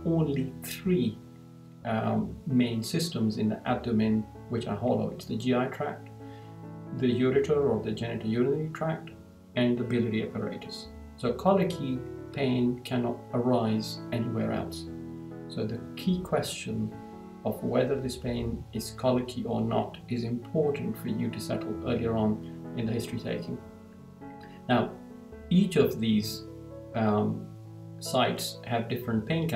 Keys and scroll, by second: 24.9 Down.